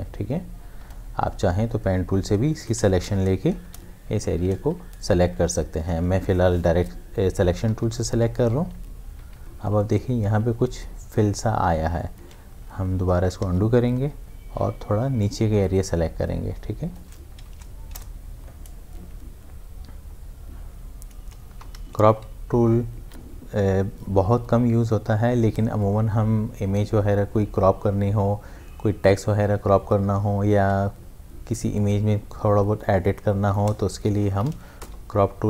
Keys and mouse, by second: 2.7 space, 3.2 shift+F5, 3.6 Return, 7.6 Return, 7.7 ctrl+d, 8.0 v, 10.2 v, 10.5 ctrl+z, 13.2 ctrl+d, 13.5-14.5 typing, 15.2-17.5 drag, 17.5 shift+F5, 18.0 Return, 21.4 Return, 21.5 ctrl+d, 23.1 v, 30.7 m, 31.8-34.1 drag, 34.1 shift+F5, 34.8 Return.